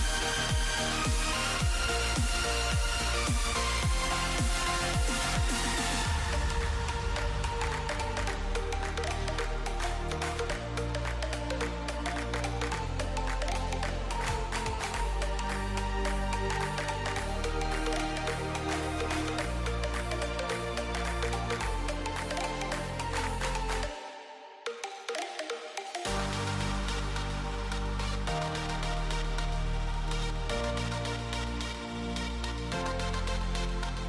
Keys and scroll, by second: 7.8-9.6 typing, 12.2-14.0 typing, 18.4-20.8 typing, 22.7-23.5 typing, 27.0-27.9 typing, 29.2-30.1 typing, 32.9-34.0 typing.